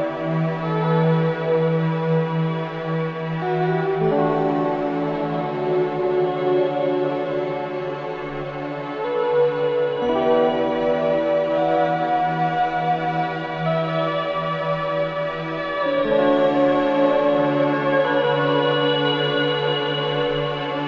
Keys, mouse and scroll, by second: 0.3 middle click, 0.8-1.3 scroll down 3, 1.3-2.4 middle drag, 2.4 scroll up 2, 2.7-3.3 middle drag, 3.3 scroll up 1, 3.5-5.0 middle drag, 5.5-6.0 scroll down 9, 6.0-6.8 middle drag, 6.8 scroll down 1, 7.0-9.6 middle drag, 9.6-9.9 scroll up 1, 9.9-11.6 middle drag, 11.6-11.9 scroll up 1, 11.9-13.3 middle drag, 16.6-18.0 middle drag, 18.0 scroll up 1, 18.2 middle click, 18.6-19.5 scroll down 3, 19.5 ctrl+z, 20.1 shift+a.